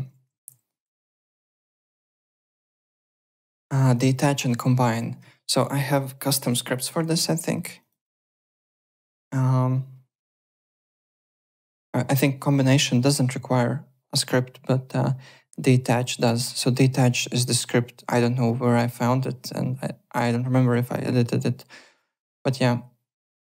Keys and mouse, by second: 0.0 w, 0.4 ctrl+z, 1.0 alt+right click, 1.3 alt+click, 1.6 alt+right click, 2.0 alt+middle click, 2.2 alt+right click, 2.7 w, 2.8 click, 3.3 alt+Tab, 4.4 alt+Tab, 4.9 alt+click, 5.2 alt+`, 5.6 click, 6.4 Home, 7.8 click, 16.2 click, 17.5 click, 23.3 click.